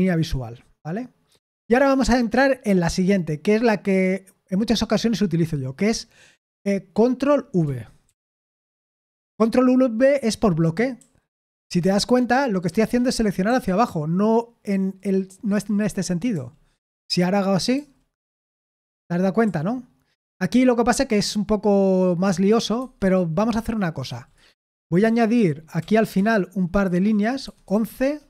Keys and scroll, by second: 1.4 Escape, 8.0 ctrl+v, 10.9-17.3 typing, 18.8-21.2 typing, 22.7 Escape, 24.0 shift+g, 25.8 o, 26.1 Return, 27.4-28.2 typing, 27.9 Return.